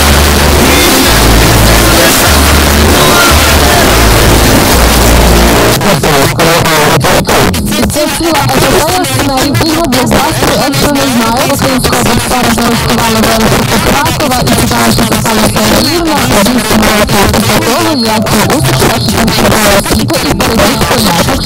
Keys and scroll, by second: 5.5 Page_Down.